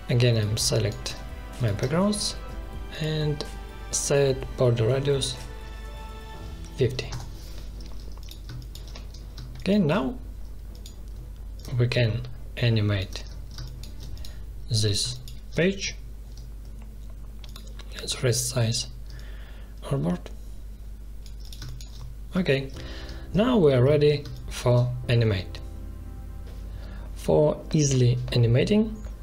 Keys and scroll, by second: 0.6 ctrl+space, 4.9-5.8 typing, 7.1 Return, 8.4 space, 13.5 space, 21.6 space, 24.2 space.